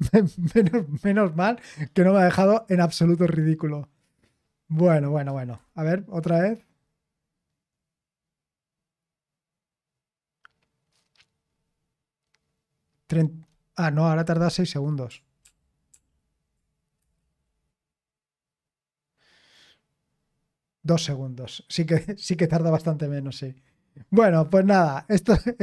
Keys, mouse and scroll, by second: 15.4 ctrl+p, 15.9 ctrl+p, 17.0 Return.